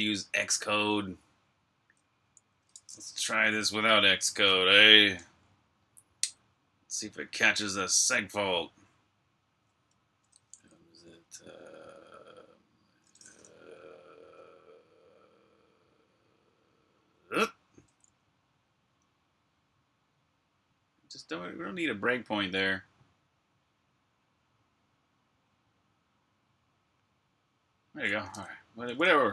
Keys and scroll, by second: 0.2 super+Tab, 17.2 alt+\, 17.3-17.7 typing, 18.9 Escape, 19.3 typing.